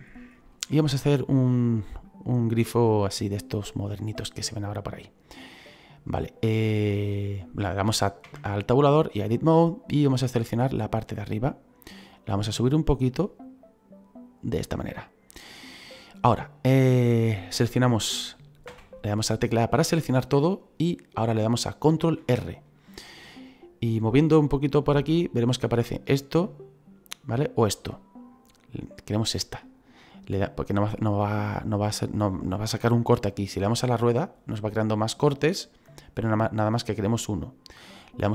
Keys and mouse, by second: 0.3 shift+middle click, 1.1 click, 2.2 middle click, 3.3 click, 6.8 click, 8.2 Tab, 9.0 click, 11.1 right click, 12.0 click, 15.3 middle click, 16.7 middle click, 18.7 a, 21.9 ctrl+r.